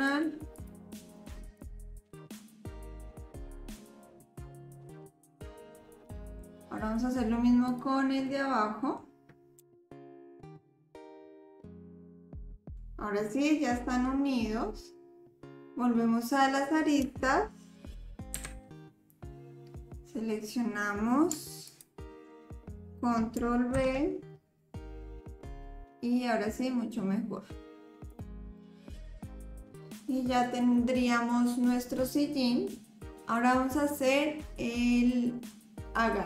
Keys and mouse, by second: 0.5 click, 1.1 click, 1.6 click, 1.9 click, 2.1 click, 2.6 shift+click, 3.3 KP_1, 3.9 ctrl+s, 4.5 click, 4.7 click, 5.0 click, 5.5 click, 5.8 middle click, 8.3 middle click, 9.6 KP_1, 9.8 click, 10.5 click, 11.0 click, 11.8 ctrl+KP_7, 12.0 click, 12.5-14.0 middle drag, 18.4 2, 21.6 alt+click, 23.7 ctrl+b, 28.6-30.6 drag.